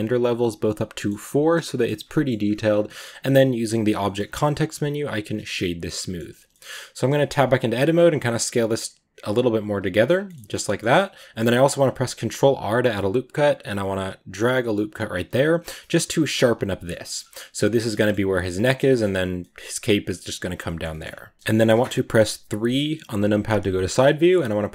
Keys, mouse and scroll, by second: 0.8-2.3 middle drag, 2.3-2.7 scroll up 2, 2.7-5.2 middle drag, 5.2 w, 5.5 middle click, 5.7 scroll down 2, 5.8-6.2 middle drag, 6.2 Tab, 6.4-7.0 middle drag, 7.0 s, 10.1 middle click, 10.3 Tab, 10.3-10.8 middle drag, 10.8 Tab, 10.8-11.8 middle drag, 11.8 ctrl+r, 16.2 scroll up 1, 16.3 middle click, 16.7 scroll down 1, 16.9 middle click, 17.1 a, 17.2 middle click, 17.4 scroll up 1, 17.8 middle click, 18.4 scroll down 2, 18.5-20.9 middle drag, 20.9-21.3 shift+scroll up 2, 21.3-22.5 middle drag, 22.5 KP_3, 23.8 shift+middle click, 23.9-24.7 scroll up 2.